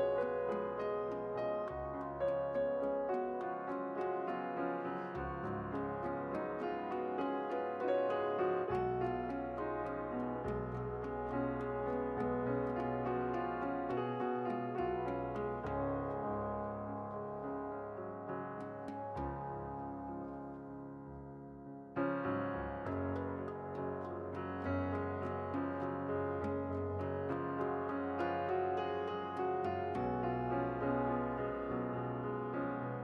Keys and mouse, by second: 0.0-2.4 right drag, 2.4 s, 5.7 click, 7.4 i, 9.4 e, 10.8 x, 11.9-12.9 right drag, 13.1-14.1 right drag, 14.1 middle click, 21.1 KP_7, 23.6 click, 24.2 shift+a, 25.1 s, 26.0 p, 28.1-29.2 drag, 29.2 Tab, 30.6-31.6 drag, 31.6-33.0 middle drag.